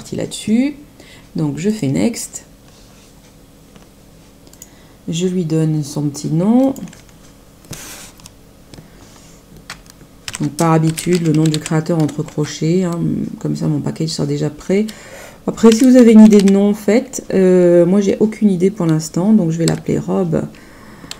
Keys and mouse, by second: 1.6 click, 4.4 click, 6.6 click, 10.2 ctrl+alt+5, 10.5-11.9 typing, 12.2 ctrl+alt+), 15.4-16.8 typing, 19.6 8, 20.8-21.1 typing.